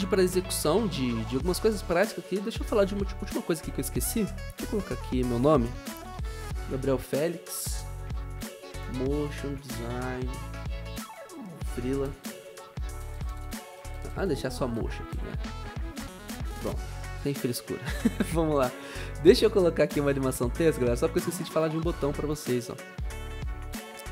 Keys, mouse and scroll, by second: 5.4-14.7 typing, 16.7 BackSpace, 18.2 BackSpace.